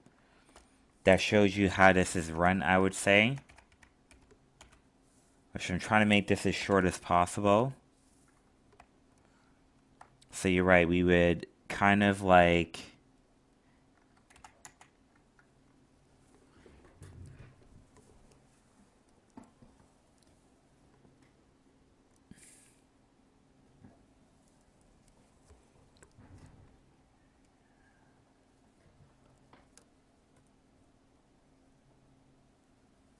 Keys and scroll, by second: 14.6 ctrl+z.